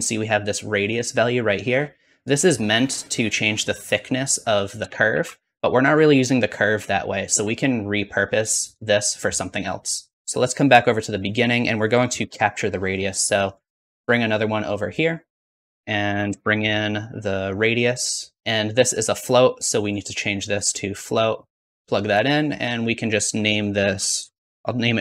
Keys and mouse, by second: 1.0-3.7 drag, 1.0-2.3 middle drag, 1.0-2.3 right drag, 5.0 ctrl+z, 5.0-8.7 ctrl+drag, 8.7 middle click, 9.5-15.6 drag, 12.1 shift+d, 15.5 shift+a, 15.7-20.5 drag.